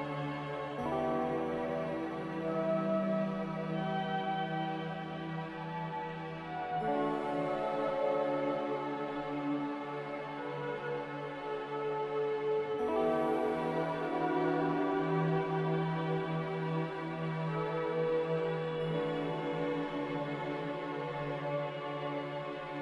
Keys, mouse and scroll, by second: 1.4 z, 2.9 n, 4.2 b, 13.4 z, 14.5 Delete, 17.5 b, 17.8 Delete, 18.3 Delete, 19.7 x.